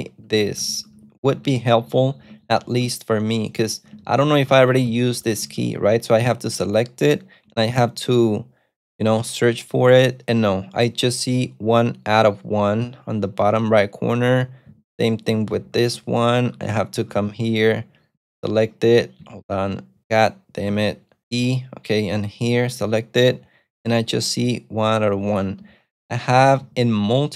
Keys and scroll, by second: 0.1-5.6 typing, 7.8 shift+8, 14.8-18.3 typing, 20.8 shift+b, 21.2 shift+e, 22.5 shift+8, 25.6 Escape, 26.2-27.3 typing.